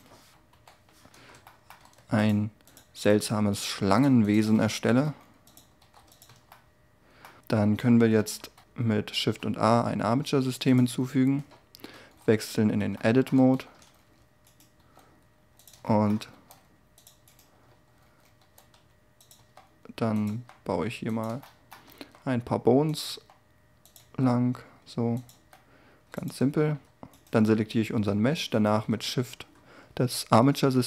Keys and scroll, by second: 0.5 5, 4.4 s, 5.8 r, 6.3 Tab, 8.1 1, 8.5 3, 11.9 Tab, 13.5 z, 14.7 g, 19.3 e, 26.3 Tab.